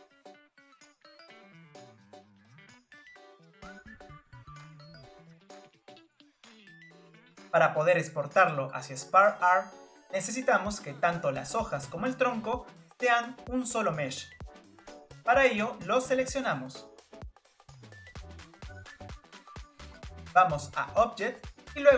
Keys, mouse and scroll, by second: 0.0-0.6 scroll down 8, 0.0 click, 0.2 drag, 0.4 middle click, 0.8 click, 0.9 click, 1.2 click, 1.3 middle click, 1.4 Tab, 1.8 click, 2.1 Tab, 2.2 Tab, 2.3 Tab, 2.3 click, 2.9 Tab, 2.9 scroll up 6, 3.0 Tab, 3.0 Tab, 3.1 click, 3.3 scroll down 5, 3.3 middle click, 3.4 middle click, 3.6 ctrl+s, 3.7 click, 3.9 ctrl+z, 4.0 middle click, 4.1 click, 4.1 scroll up 2, 4.1 middle click, 4.3 click, 4.5 click, 4.6 middle click, 4.8 click, 4.9 click, 5.0 scroll up 1, 5.1 click, 5.2-5.6 scroll down 3, 5.3 click, 5.6 middle click, 5.7 click, 5.8 scroll up 20, 5.9 scroll down 3, 6.0 click, 6.1 click, 6.2 middle click, 6.3 Tab, 6.4 Tab, 6.5 scroll down 1, 6.6 click, 6.7 scroll up 1, 6.8 Tab, 6.8 Tab, 6.9 click, 7.3 click, 7.3 Tab, 7.4 click, 7.6 scroll down 4, 7.7 click, 7.7 Tab, 7.7 scroll up 1, 7.8 scroll down 4, 7.9 middle click, 8.1 ctrl+s, 8.3-10.0 shift+middle drag, 10.0 scroll up 3, 11.4 Tab, 11.7-12.1 scroll up 2, 12.1 Tab, 12.5-13.3 scroll up 2, 13.3 click, 14.3-16.5 scroll up 2, 16.5 click, 18.1 ctrl+click, 18.9 shift+click, 20.4-20.7 scroll down 2.